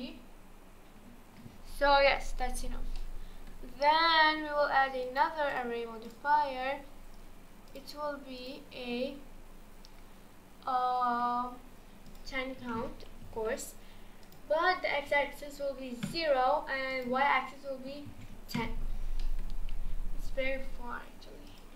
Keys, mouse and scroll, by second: 3.0-3.6 middle drag, 3.6-5.0 scroll down 3, 5.0-9.0 drag, 9.0-9.7 scroll down 4, 9.7-12.1 scroll up 1, 12.1-19.2 drag, 19.2 middle drag, 19.5-19.9 scroll down 2, 19.9-20.5 scroll up 2, 21.5-21.7 drag.